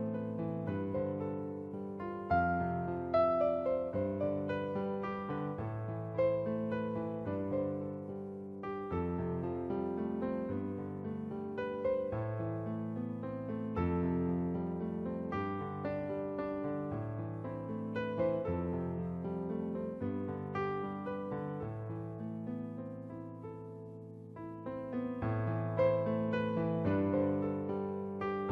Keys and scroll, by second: 0.3 alt+shift+Return.